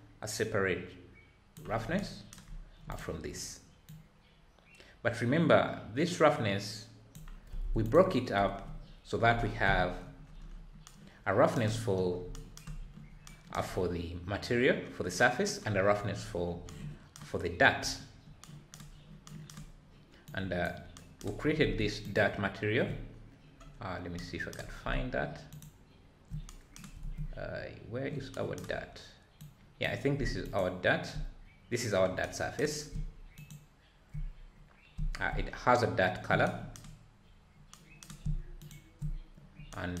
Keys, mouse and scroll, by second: 3.0 click, 3.9-6.9 drag, 9.6 n, 13.9-14.6 scroll up 2, 20.3-22.1 drag, 24.1-24.6 scroll down 7, 25.6 ctrl+shift+click, 27.6 scroll up 3, 29.4-30.6 drag, 33.3 ctrl+shift+click, 38.6-40.0 drag.